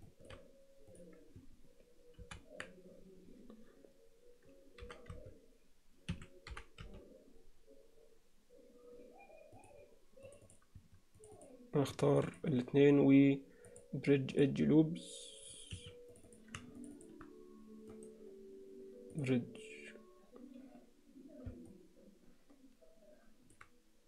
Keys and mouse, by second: 0.1 shift+middle click, 0.9 click, 2.2 ctrl+l, 4.8 g, 6.5 g, 10.3 click, 11.4 click, 12.3 shift+click, 13.7 click, 15.8 Escape, 16.2 click, 17.0 shift+click, 18.0-19.5 right drag, 21.7-23.6 middle drag.